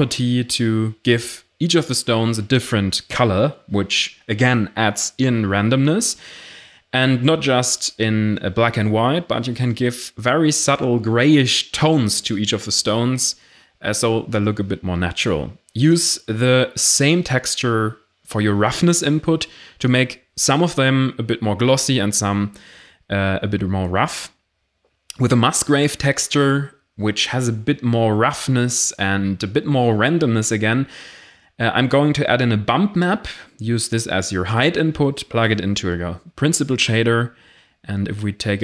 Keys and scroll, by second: 12.5-13.4 typing, 13.5 Return, 22.4 shift+a, 22.7 m, 22.8 u, 22.9 c, 23.2 Return, 31.0 shift+a, 31.5 ctrl+b, 31.6 u, 31.6 m, 31.8 Return.